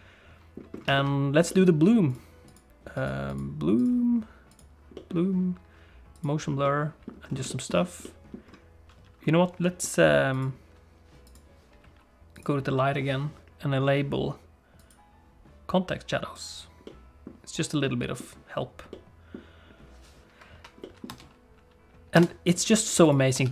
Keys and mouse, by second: 0.9 shift+middle click, 1.4 middle click, 2.0 click, 3.0 click, 3.2 click, 4.5 click, 4.9 middle click, 6.1 click, 6.6 middle click, 7.4 shift+middle click, 8.0 middle click, 10.4 click, 11.2 click, 12.3 click, 14.7 click, 16.3 click, 16.8 middle click, 17.8 middle click, 18.9 middle click, 20.8 middle click, 21.1 space, 22.1 space, 23.1 click, 23.4 ctrl+s.